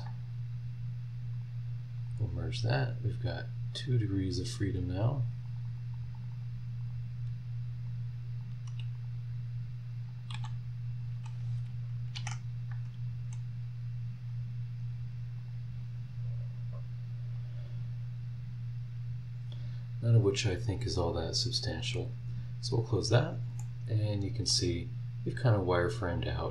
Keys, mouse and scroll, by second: 1.3 click, 2.0 click, 3.3 click, 3.7 click, 5.0 click, 5.3 middle click, 5.4-6.6 drag, 6.6 middle click, 6.8 click, 7.8 click, 8.9 click, 10.1 click, 10.3 v, 12.1 ctrl+z, 21.7 click, 22.8 scroll up 1, 23.6-24.7 middle drag.